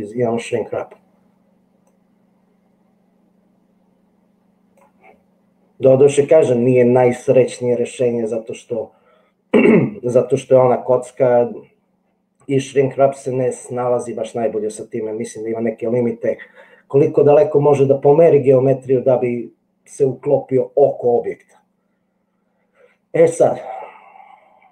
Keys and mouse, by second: 0.0 middle click, 2.0-3.9 middle drag, 3.9-5.0 drag.